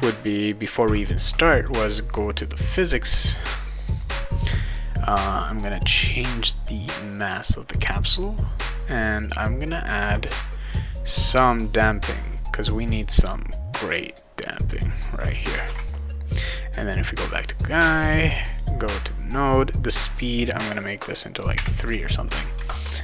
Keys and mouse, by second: 0.7 click, 1.6 click, 6.7 click, 7.3 click, 12.3-13.0 drag, 13.9-14.5 drag, 15.3 click, 15.6 ctrl+s, 16.9 click, 18.6 click, 20.1 click, 20.3 click, 22.7 ctrl+s.